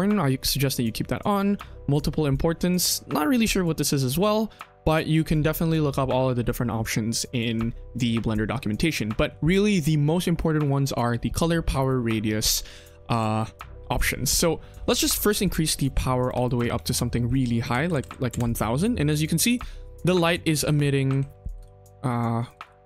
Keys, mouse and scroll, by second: 15.2 click, 16.3-18.2 drag, 17.8 KP_0, 17.9 KP_0, 19.0 click, 19.2 KP_1, 19.6-20.0 middle drag, 20.3 click, 21.5 shift+d, 22.5 shift+d.